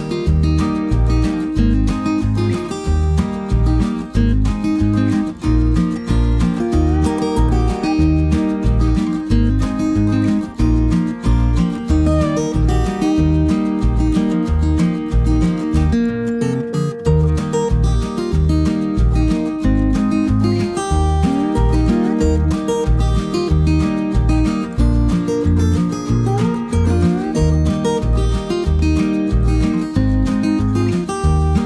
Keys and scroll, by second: 0.8-1.9 typing, 3.1 b, 5.3 F7, 7.2 -, 7.7 space, 9.0 +, 9.4 space, 11.9 b, 16.3 s, 16.8 ctrl+d, 20.7-21.4 typing, 27.7 ctrl+-, 29.1 +.